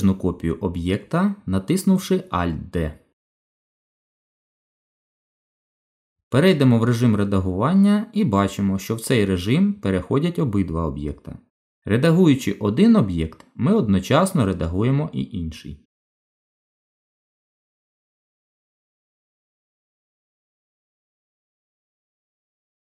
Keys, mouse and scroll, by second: 2.6 alt+d, 7.6 Tab, 9.5 click, 11.4 g, 16.8 click, 18.2 click, 19.5 g.